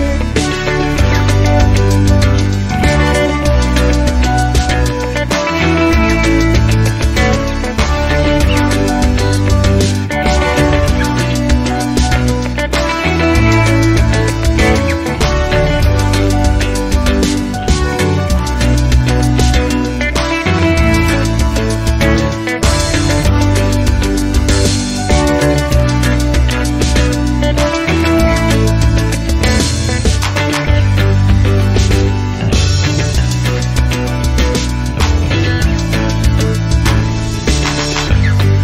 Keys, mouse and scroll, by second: 1.7 KP_Subtract, 2.0 KP_2, 2.3 KP_5, 4.0 click, 7.4-8.1 drag, 8.6 KP_0, 10.0 click, 10.5-11.1 drag, 11.6 KP_2, 12.1 KP_5, 13.6 click, 14.4 click, 15.8 KP_0, 17.5 click, 19.5 0, 22.5 scroll down 2, 25.9 click, 26.9 KP_1, 27.2 KP_0, 28.6 click, 30.0 KP_Decimal, 30.4 KP_5, 30.7 KP_0, 32.2 click, 34.2 click, 35.2 KP_1, 35.5 KP_0, 36.9 click, 37.6 click.